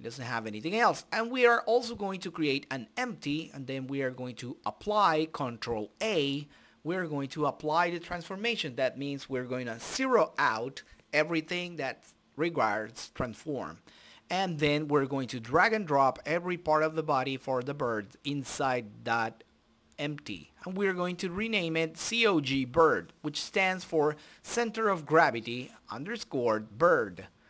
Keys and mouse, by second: 0.9 s, 2.6 ctrl+a, 5.3-6.4 drag, 7.9-9.6 drag, 11.5-14.3 drag, 14.3 Tab, 14.7 Tab, 15.6 a, 16.1 right click, 16.5 click, 19.1-20.4 drag, 21.1-22.4 right drag, 27.2-27.4 drag.